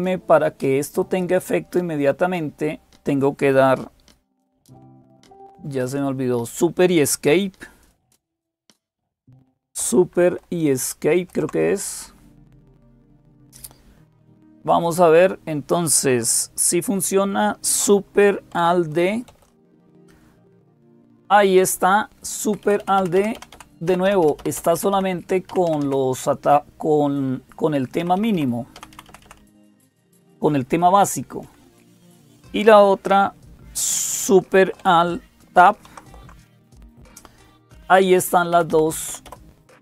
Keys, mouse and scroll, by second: 0.0-39.8 typing, 7.7 click, 10.9 super+Escape, 14.5 click, 19.1 alt+super+d, 22.3 Down, 22.5 Down, 22.6 Down, 22.8 Down, 23.0 Down, 23.4 Down, 23.7 Up, 23.9 Up, 24.1 Up, 24.2 Up, 24.8 Up, 25.3 Down, 25.5 Down, 25.7 Down, 27.8 Up, 28.8 Up, 29.1 Down, 31.3 Down, 35.7 alt+super+Tab, 38.4 Down, 38.5 Down, 38.9 Up, 39.1 Up, 39.7 Down.